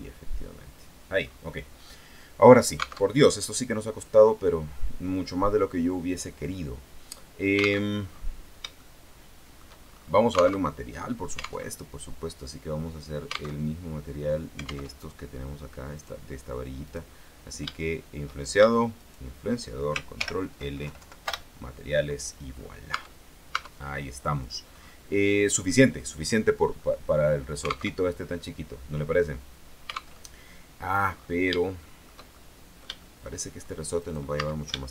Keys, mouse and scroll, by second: 0.0 click, 1.4 scroll up 2, 1.9-2.9 scroll down 2, 3.2 alt+Tab, 8.0 alt+Tab, 8.2-9.0 alt+scroll down 4, 9.0-10.0 shift+middle drag, 10.3-10.7 scroll up 2, 10.8 alt+Tab, 11.8 alt+Tab, 13.7 alt+Tab, 15.0 alt+Tab, 16.1 right click, 17.0 right click, 19.2 shift+right click, 20.4 ctrl+shift+l, 21.0 ctrl+Down, 21.4 ctrl+shift+Return, 22.6-23.0 scroll down 2, 23.1 Tab, 23.7 Tab, 23.9-24.3 scroll up 2, 24.6 right click, 25.2-25.7 scroll down 2, 26.8-27.3 scroll up 2, 28.1 alt+Tab, 30.4 alt+Tab, 31.3-31.8 scroll up 4, 31.8 shift+middle click, 32.5-33.6 shift+middle drag, 33.8-34.1 shift+scroll up 1, 34.2 right click, 34.5 Tab.